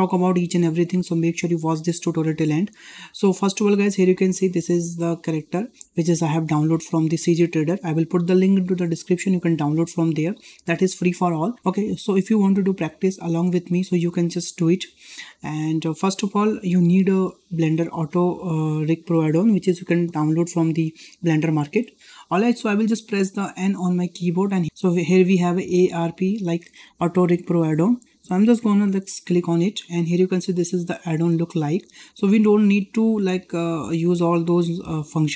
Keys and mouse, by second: 0.8-1.2 shift+middle drag, 4.1-4.5 shift+middle drag, 4.7-5.1 ctrl+middle drag, 5.4 shift+middle click, 16.0-16.5 ctrl+middle drag, 16.8 shift+middle click, 23.5 n, 27.6 click.